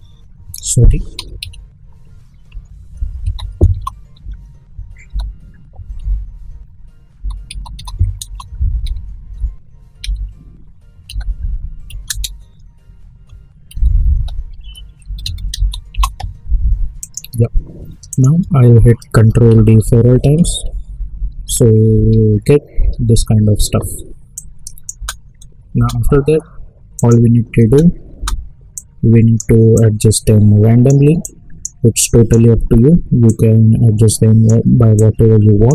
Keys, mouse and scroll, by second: 1.4 typing, 2.5 Left, 2.8-5.5 typing, 6.0 Right, 6.9-9.7 typing, 10.0 Right, 11.0 typing, 13.0-16.0 typing, 17.0 click, 19.2 ctrl+d, 24.3 click, 24.9 space, 26.9 click, 27.6 space, 28.7-35.7 drag.